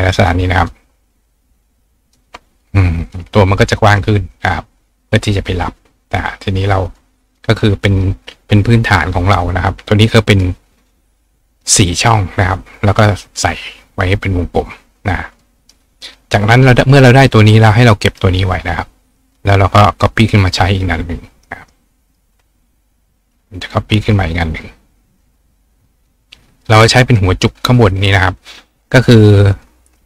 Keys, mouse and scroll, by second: 0.2 click, 0.6 click, 1.5 shift+click, 2.6 drag, 6.9 click, 7.3 click, 13.7 click, 15.3 click, 15.6 right click, 16.7 click, 19.3 click, 19.9-20.3 drag, 20.9-22.2 drag, 21.3 right click, 21.5 right click, 23.4 click, 24.0-25.6 right drag, 24.5 click, 25.0 drag, 25.9 click, 29.6-30.0 drag.